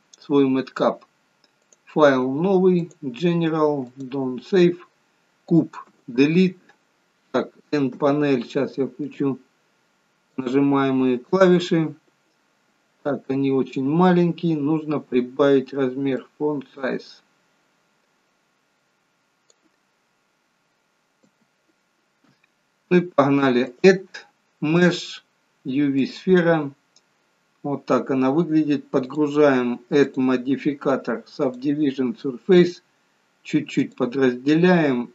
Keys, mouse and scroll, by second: 17.4 click, 21.3 n, 23.8 click, 27.0-27.3 scroll up 5, 29.1 click, 30.0 click, 33.9 click.